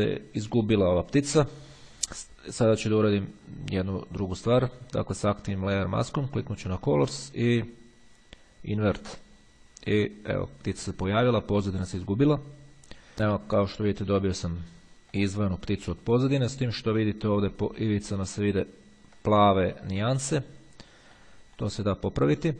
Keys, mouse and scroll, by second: 3.8 click, 7.0 click, 8.9 click, 13.2-13.5 scroll up 1, 15.2 middle click, 18.8-19.4 ctrl+scroll up 2, 20.6-21.1 scroll down 1, 21.4 click.